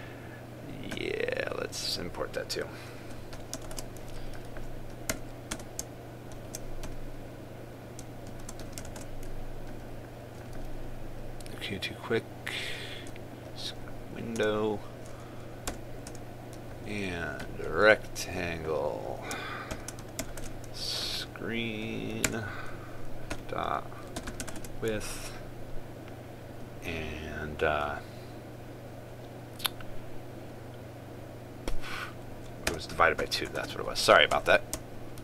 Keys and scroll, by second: 4.4 ctrl+space, 9.6 ctrl+space, 21.0 ctrl+space, 25.2 ctrl+space.